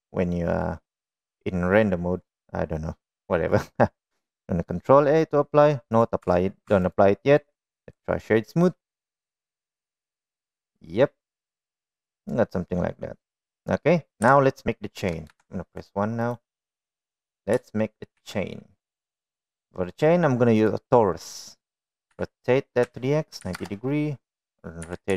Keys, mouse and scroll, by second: 5.6 middle click, 6.5 click, 6.9 Tab, 7.3 Tab, 7.4 click, 8.2 click, 9.9-12.0 middle drag, 12.7-13.4 middle drag, 14.9 KP_1, 14.9 KP_2, 16.0 KP_1, 16.6 right drag, 18.8 shift+a, 22.8 r.